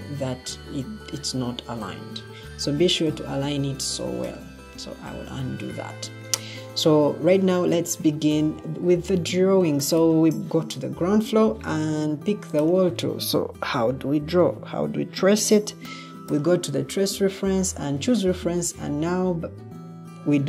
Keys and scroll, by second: 2.1 ctrl+z.